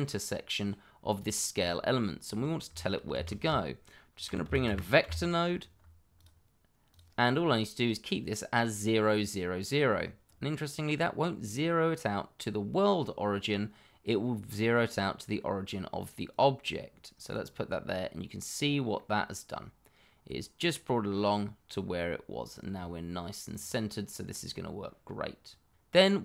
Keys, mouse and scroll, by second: 1.2 shift+middle click, 1.3 middle click, 1.4 shift+middle click, 1.9 middle click, 2.0 shift+middle click, 3.1 shift+a, 4.2 v, 4.4 e, 4.6 c, 5.0 t, 6.1 click, 16.3 click, 18.5-18.9 scroll down 1, 18.9 middle click, 23.5 click, 24.3 middle click, 25.6 scroll down 1.